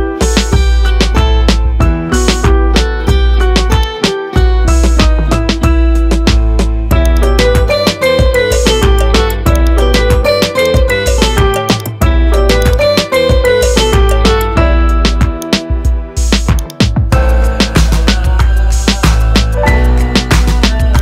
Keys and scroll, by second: 5.8 Tab.